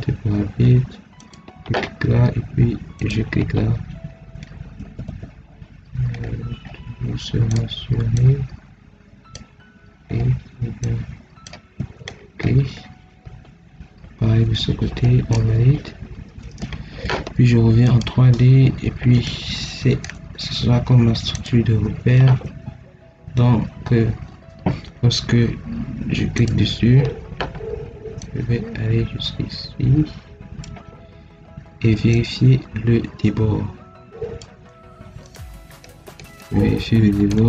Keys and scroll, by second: 4.7 Escape, 11.7 Escape, 24.1 Escape.